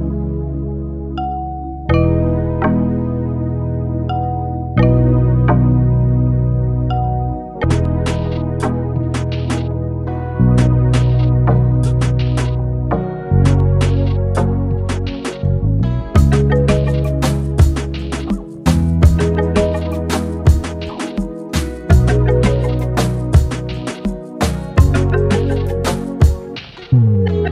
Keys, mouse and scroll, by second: 0.7-2.7 shift+drag, 2.7 ctrl+c, 3.5 click, 4.9 ctrl+v, 5.3-6.2 alt+scroll down 1, 6.2-9.1 drag, 10.8-15.5 drag, 15.5 1, 16.0 Return, 16.6-19.1 drag, 19.1-22.7 alt+shift+drag, 27.2 ctrl+g.